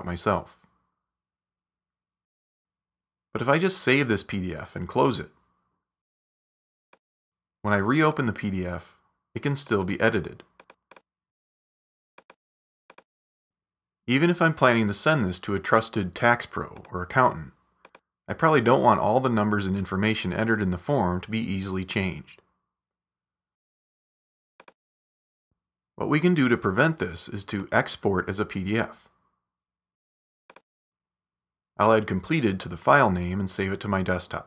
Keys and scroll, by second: 3.9 super+s, 5.2 super+w, 14.1-15.4 typing, 19.3-20.8 typing, 33.1-34.4 typing.